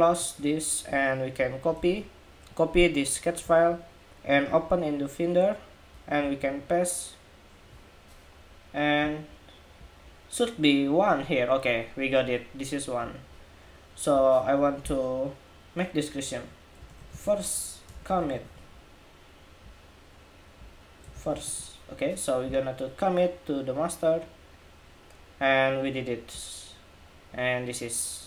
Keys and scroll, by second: 1.5 super+c, 5.9 super+v.